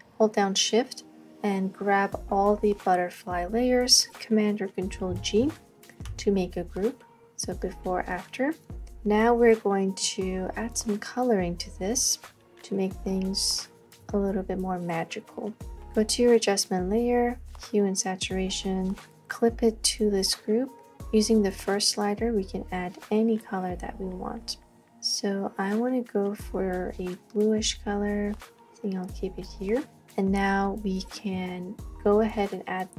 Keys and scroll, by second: 5.1 super+g.